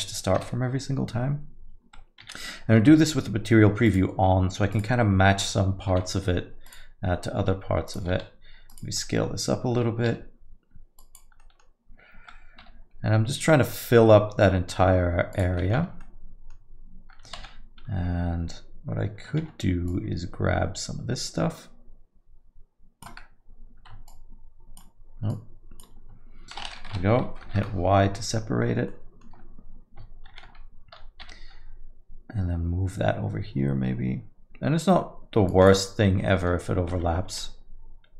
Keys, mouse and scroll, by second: 0.4 KP_7, 2.2 z, 3.9 click, 4.7 click, 5.9 g, 7.4 r, 8.1 s, 9.1 middle click, 10.1 g, 11.4 middle click, 12.6 g, 15.6 middle click, 16.5 Tab, 16.5 middle click, 17.5 alt+a, 19.4 shift+z, 19.9 click, 24.1 shift+click, 25.3 shift+click, 28.9 y, 28.9 Return, 28.9 middle click, 30.4 shift+z, 31.5 g, 36.2 middle click, 37.3 z.